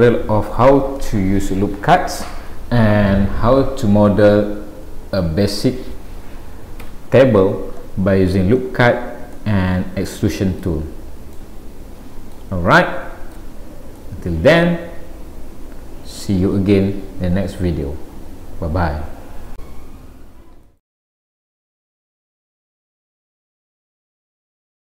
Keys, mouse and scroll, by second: 6.8 Tab, 9.4 middle click, 11.3 middle click, 12.8 shift+middle click, 13.4 shift+middle click, 13.6-14.0 scroll down 2, 14.0 middle click.